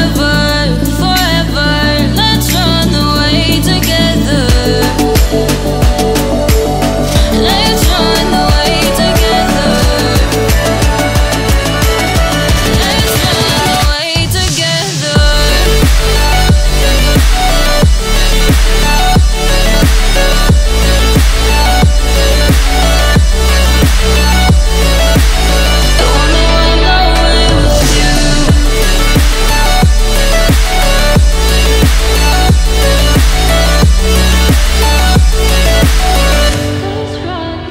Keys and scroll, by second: 10.4 ctrl+t.